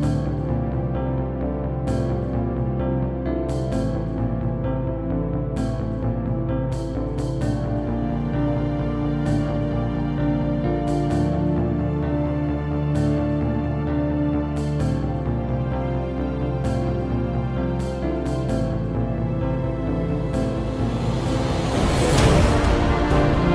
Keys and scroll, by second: 14.1-19.9 typing, 15.4 Return, 22.4-23.3 typing.